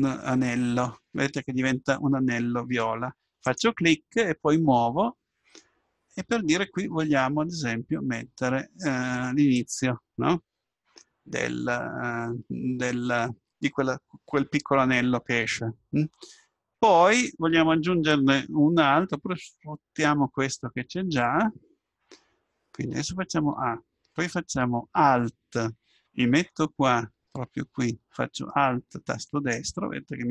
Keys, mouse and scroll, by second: 23.5 a, 29.3-30.3 right drag.